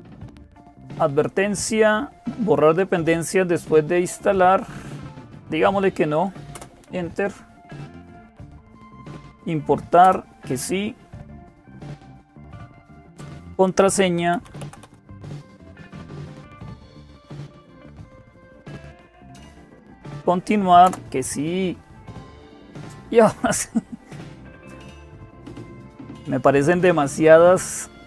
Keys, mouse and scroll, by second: 0.0-28.0 typing, 6.3 Return, 9.8 Return, 16.9 Return, 20.6 Return.